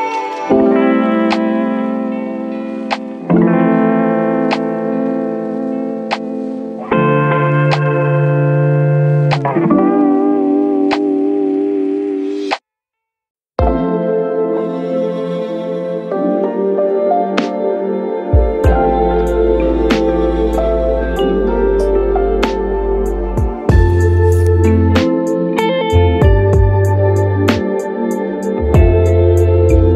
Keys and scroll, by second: 13.1 6, 13.3 Return.